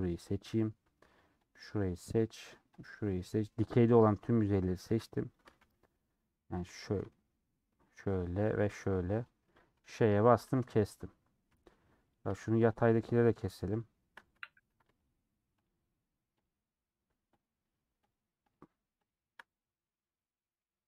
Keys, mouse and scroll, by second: 0.3-1.9 shift+middle drag, 1.9 shift+click, 3.1 shift+click, 5.6 alt+z, 5.8 scroll down 1, 5.8 scroll up 1, 5.9-10.1 middle drag, 10.1 ;, 12.1 click, 13.2-14.7 shift+drag, 14.7 ctrl+z, 14.9-19.6 shift+drag, 19.9-20.8 middle drag.